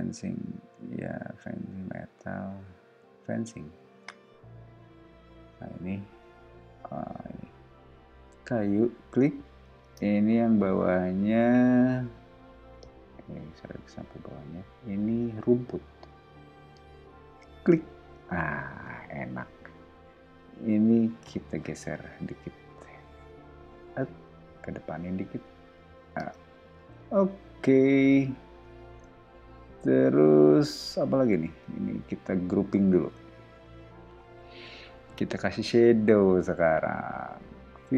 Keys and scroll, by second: 9.8 space, 18.1 space, 18.7 ⟲, 21.8 m, 26.1 space, 26.8 ⟲, 27.3 o, 31.4 space, 33.0 super+g.